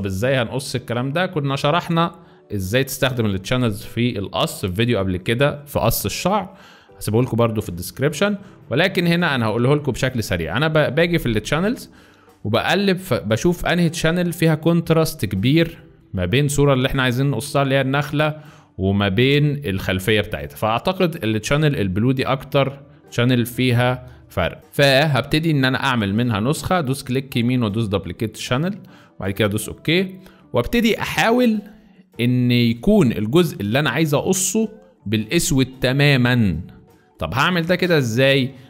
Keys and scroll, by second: 24.1 space, 24.6 ctrl+z, 32.3 space, 32.8 z, 35.4 z, 37.0 space, 37.7 z.